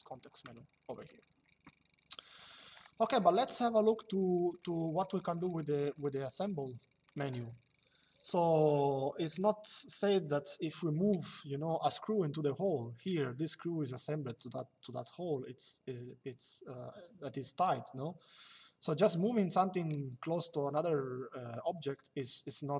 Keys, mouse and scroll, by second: 4.2 click, 6.7 click.